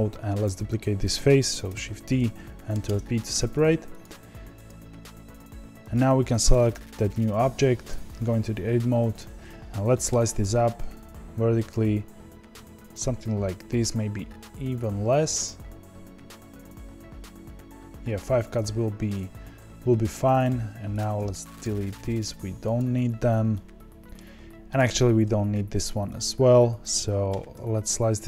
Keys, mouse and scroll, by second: 0.4 click, 1.6 shift+d, 2.8 p, 3.3 Tab, 4.0 click, 4.6-6.5 click, 6.5 click, 7.8 Tab, 10.0 ctrl+r, 20.4 3, 20.9 click, 22.7 x, 23.5-24.7 middle drag, 24.7 click, 26.1 x, 27.2 ctrl+r.